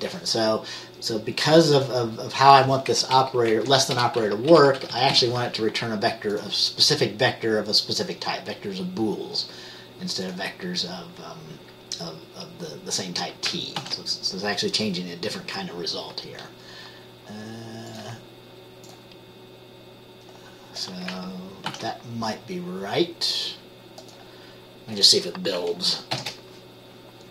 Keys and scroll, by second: 3.3 Right, 3.6 Left, 4.1-5.3 typing, 13.9 ctrl+s, 21.8 ctrl+s, 26.4 ctrl+b.